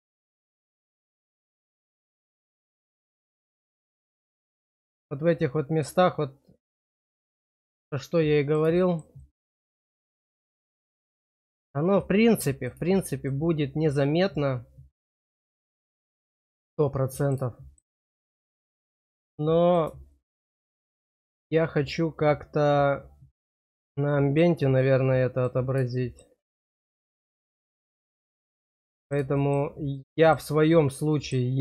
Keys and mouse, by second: 1.1-4.4 middle drag, 7.7 middle click, 8.7 shift+middle click, 9.1-12.7 middle drag, 12.9 shift+middle click, 13.6-15.7 middle drag, 16.2 shift+middle click, 16.7 middle click, 17.5 shift+middle click, 18.8 middle click, 20.1 shift+middle click, 20.9-23.8 middle drag, 24.0 shift+middle click, 24.7 middle click, 26.0 shift+middle click, 28.6 middle click, 30.0 middle click, 31.2 shift+middle click.